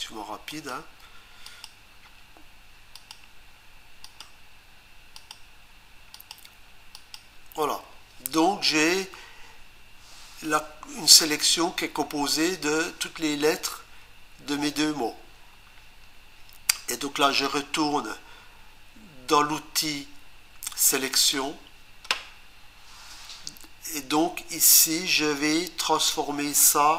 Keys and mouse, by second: 0.5 click, 1.5 click, 2.9 click, 4.0 click, 5.2 click, 6.1 click, 20.8 click.